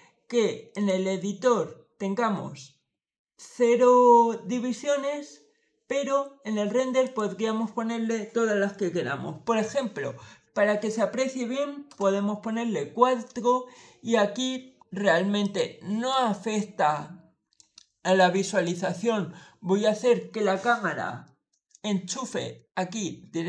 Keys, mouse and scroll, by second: 0.6 click, 6.9 click, 10.3 4, 11.7 Return, 15.3 click, 16.0-17.4 middle drag, 18.5 click.